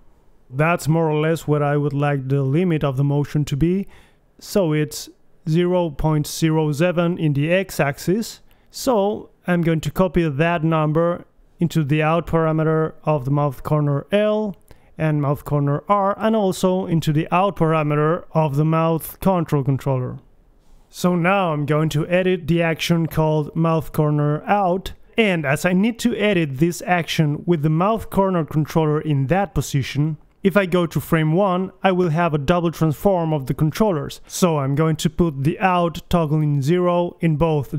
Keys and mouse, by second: 0.5-2.0 drag, 3.9-5.3 middle drag, 5.8-7.3 middle drag, 9.9-12.8 drag, 12.8-15.8 middle drag, 15.8 ctrl+c, 16.5 ctrl+v, 18.5 ctrl+v, 19.7 a, 19.9 alt+g, 19.9 a, 20.0 alt+r, 20.3-21.3 drag, 20.3 a, 20.8 g, 21.3 right click, 21.6-23.0 drag, 22.1 middle click, 23.0 right click, 23.9 KP_1, 27.1-28.3 drag, 32.1 Right, 32.9 Left, 33.5 Right, 34.4 Left, 37.0-37.7 drag.